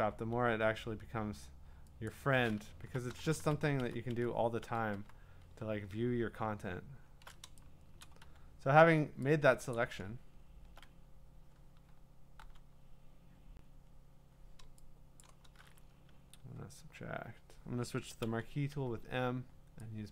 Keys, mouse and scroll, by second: 2.5-5.0 typing, 2.8 click, 5.6 scroll, 5.7 scroll down 4, 5.8 scroll up 1, 6.0-7.4 scroll down 21, 8.0 middle click, 8.0 click, 8.0 scroll, 8.2-9.8 q, 9.8 click, 10.2-11.0 scroll, 11.8-12.4 typing, 14.3 q, 15.2-18.4 drag, 18.4 m.